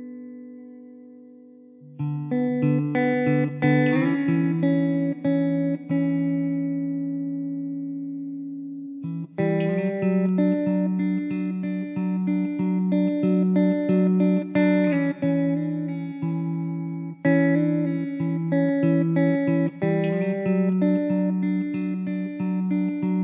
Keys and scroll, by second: 0.1 ctrl+r, 2.9 ctrl+r, 6.6 3, 6.7 ctrl+z, 6.7 Tab, 6.9 s, 8.5 Tab, 12.8 s, 13.7 e, 14.6 s, 16.5 3, 20.3 ctrl+r, 21.7 ctrl+r.